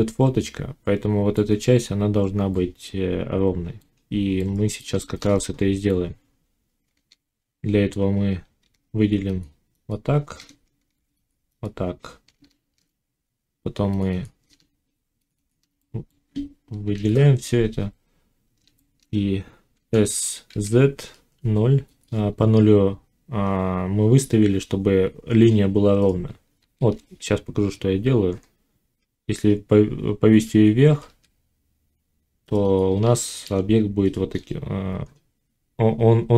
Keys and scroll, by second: 8.5 ctrl+r, 10.7 ctrl+r, 12.5 shift+Tab, 16.9 1, 19.7 s, 26.5 ctrl+z, 30.8 g.